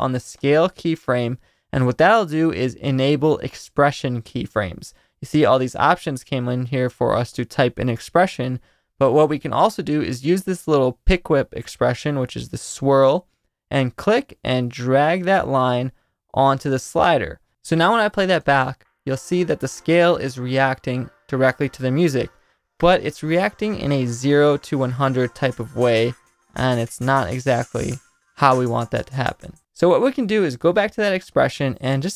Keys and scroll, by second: 18.4 space.